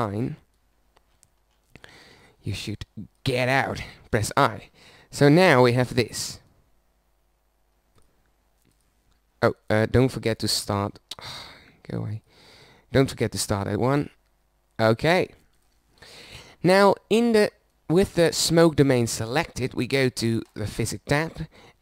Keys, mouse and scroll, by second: 5.6 i, 18.4-19.4 middle drag, 19.9-21.8 drag.